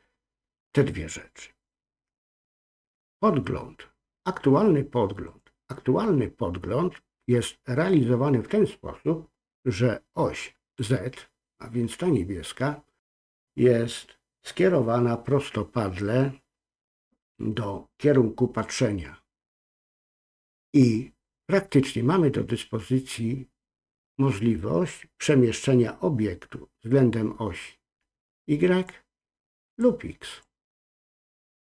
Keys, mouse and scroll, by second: 28.3 click, 29.8 click.